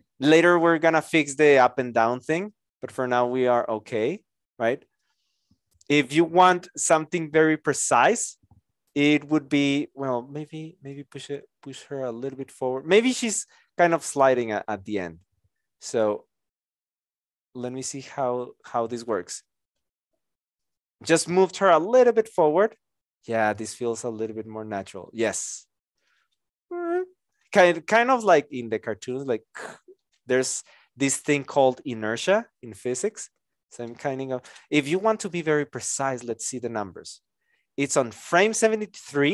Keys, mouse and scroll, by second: 11.1 shift+click, 38.5 Return.